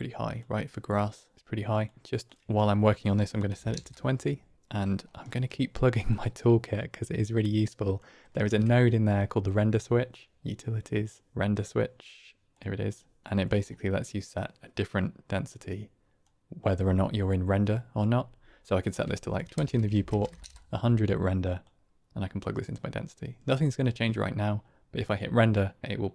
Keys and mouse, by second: 1.3 click, 2.2-4.4 drag, 5.3 middle click, 6.0-7.9 drag, 8.5 shift+a, 13.2 click, 15.6 click, 18.8-20.8 drag, 20.4 KP_0, 21.6-22.5 drag.